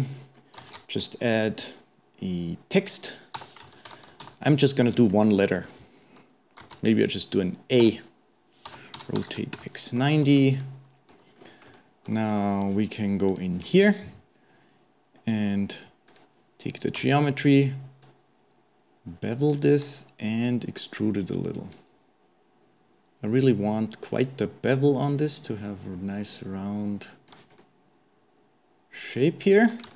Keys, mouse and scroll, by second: 0.3-0.6 scroll down 1, 0.6 shift+a, 3.4 Tab, 3.9 shift+Home, 4.2 Delete, 5.0-6.6 scroll up 2, 6.6 shift+a, 7.8 Tab, 10.7-11.4 middle drag, 11.4-11.8 scroll up 3, 11.8-13.3 shift+middle drag, 13.3 click, 16.1 click, 18.0-23.5 shift+drag, 24.3-27.3 shift+drag, 27.7-29.9 middle drag.